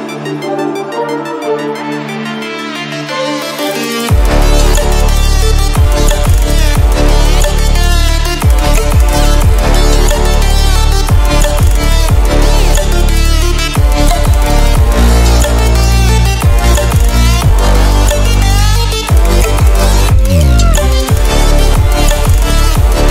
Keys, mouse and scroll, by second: 0.8 ctrl+alt+scroll up 2, 2.1 ctrl+alt+scroll up 2, 2.9-4.4 scroll down 2, 4.4-5.0 scroll down 1.